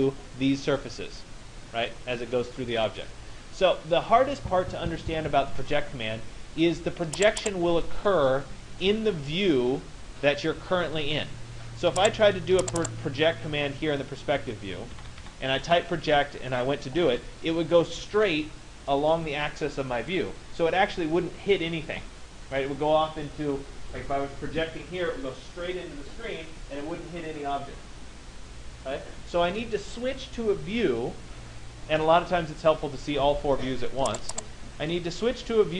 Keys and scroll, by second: 14.5 Escape.